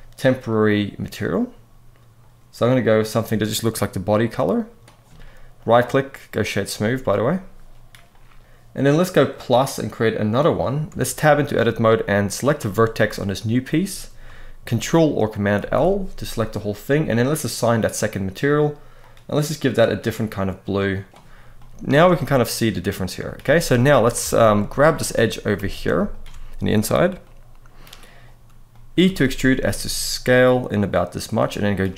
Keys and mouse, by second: 5.3-6.2 right drag, 9.9 click, 10.6 Tab, 12.0 click, 12.4 middle click, 15.3 ctrl+l, 17.4 click, 21.3 middle click, 21.6 Tab, 21.8-22.9 middle drag, 23.1 Tab, 23.5 middle click, 23.9 alt+a, 25.6 alt+a, 25.8 alt+shift+click, 28.4 middle click, 28.8 e, 29.1 s, 30.4 click, 31.1 middle click, 31.6 g.